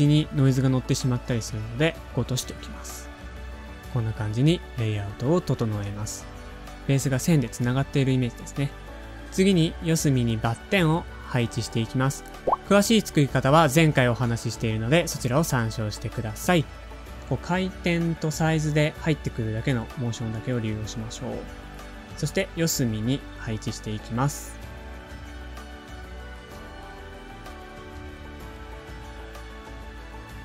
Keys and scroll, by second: 0.2 shift+Right, 0.2 shift+Down, 0.4 shift+Up, 0.7 shift+Left, 3.1 super+Up, 3.2 shift+Left, 4.2 shift+Right, 4.6 shift+Up, 5.1 shift+Right, 5.4 shift+Down, 5.9 shift+super+a, 9.0 Tab, 9.0 typing, 11.7 typing, 17.3 super+Tab, 17.3 typing, 21.6 BackSpace, 22.8 shift+super+-, 23.7 shift+Up, 23.8 shift+Right, 24.6 shift+Up, 24.8 shift+Right, 25.0 shift+super+-, 25.0 super+Down, 25.2 typing, 25.3 Return, 25.7 Return, 25.8 Return, 25.9 super+d, 26.0 shift+Down, 26.4 shift+Down, 26.4 shift+Left, 26.6 shift+Left, 26.6 shift+super+-, 26.7 Up, 27.0 super+Down, 27.1 super+-, 27.2 shift+Up, 27.4 shift+Up, 27.6 super+d, 27.8 shift+Left, 27.8 ,, 28.4 super+Down, 28.6 super+Up, 28.6 shift+Right, 28.7 shift+Right, 28.9 shift+Right, 30.3 Home.